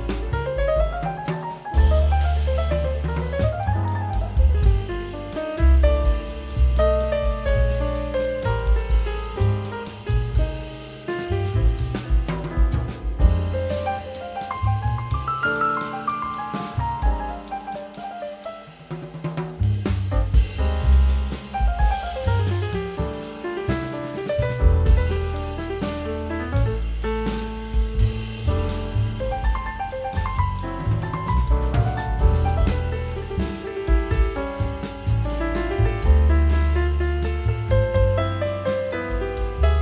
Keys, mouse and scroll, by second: 1.4 ctrl+k, 4.4 right click, 6.3 scroll down 1, 6.7 scroll up 1, 9.5 right click, 10.3 shift+click, 11.2 scroll down 1, 12.5 scroll up 1, 16.5 scroll up 1, 20.5 scroll down 1, 21.1 scroll up 1, 26.3 scroll down 1, 29.7-30.8 scroll down 1, 31.0 scroll up 1, 34.2 scroll down 1, 36.5 ctrl+g, 36.8 scroll up 2.